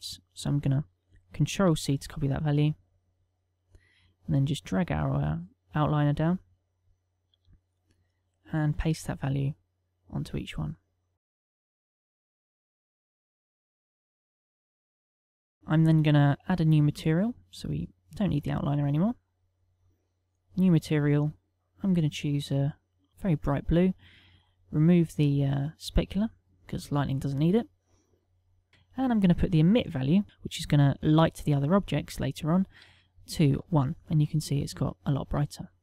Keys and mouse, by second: 3.0 ctrl+c, 5.0 click, 7.6 click, 9.3 middle click, 10.0 ctrl+v, 11.3 click, 11.7 click, 11.9 ctrl+v, 12.2 click, 12.5 ctrl+v, 12.7 click, 13.0 ctrl+v, 13.3 click, 13.6 ctrl+v, 13.7 click, 13.8 click, 14.3 click, 14.5 click, 14.8 ctrl+v, 15.3 ctrl+middle click, 15.7 a, 16.3 middle click, 17.5 click, 19.4 click, 20.5 click, 21.6 click, 22.8 click, 24.8 middle click, 25.8 click, 26.8 middle click, 28.8 click.